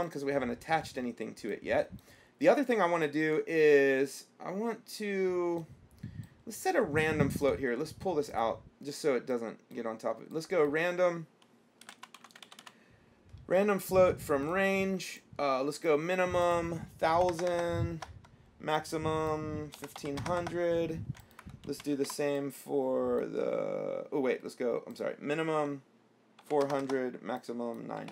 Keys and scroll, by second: 11.8-13.4 typing, 17.4 KP_1, 17.5 KP_0, 20.0 KP_1, 20.2 KP_5, 20.5 KP_0, 21.9 ctrl+c, 22.2 ctrl+v, 26.6 KP_4, 26.9 KP_0.